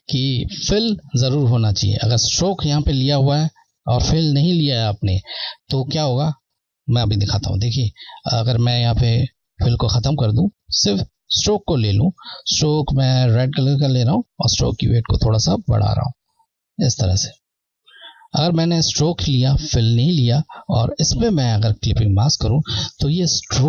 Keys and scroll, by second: 7.9 Left, 11.0 Left, 13.7 Left.